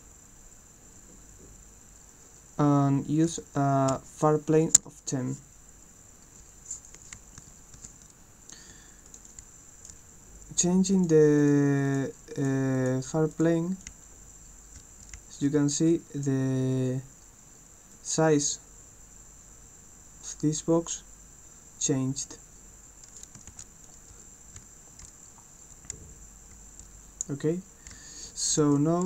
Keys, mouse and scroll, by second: 9.1 click, 9.3 right click, 9.5 d, 11.0 click, 11.4 click, 11.8 click, 12.4 click, 12.7 click, 13.3 click, 13.9-16.2 right drag, 13.9-16.1 typing, 17.9-23.2 drag, 23.9-29.0 right drag, 24.1-26.5 typing, 27.7-29.0 typing.